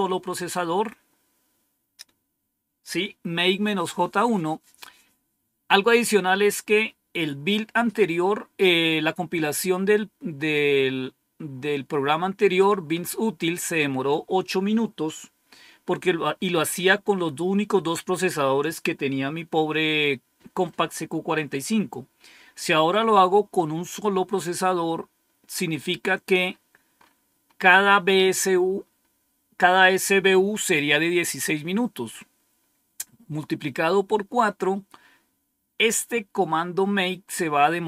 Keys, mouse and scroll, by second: 26.3-26.9 scroll up 2, 26.9-28.3 scroll up 1, 28.3-29.0 scroll up 1, 35.6-37.8 scroll down 2.